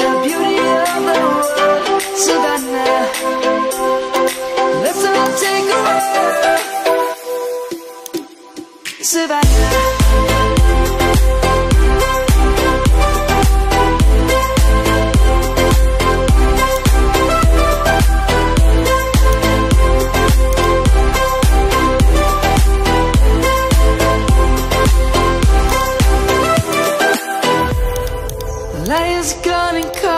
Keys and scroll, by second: 6.7 Return, 8.8 Left, 9.0 Left, 9.2 Left, 9.3 Left, 9.5 Left, 9.7 Left, 9.9 Left, 13.7 Left, 13.9 Left, 15.5 ctrl+t, 17.9 ctrl+z, 22.4 Return.